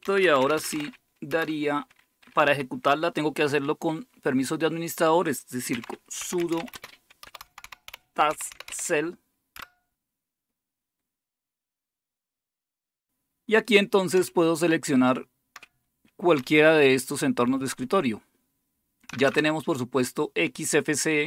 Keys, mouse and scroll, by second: 0.0-1.2 typing, 5.5-9.1 typing, 9.5 Return, 14.2 End, 14.6-15.4 Down, 16.3-17.6 Up, 16.9 Up, 19.1 Down, 19.2 Down.